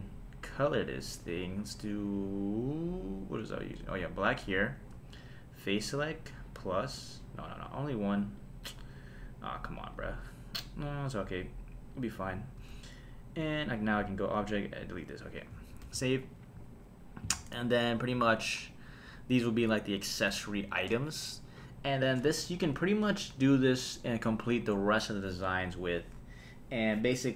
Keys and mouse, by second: 0.7 click, 1.5-3.9 drag, 5.0 Tab, 6.7 click, 7.6-8.4 drag, 9.5 click, 9.9 click, 10.6 click, 11.9 click, 12.6 Tab, 13.7 click, 14.5 click, 15.9 super+s, 17.3 click.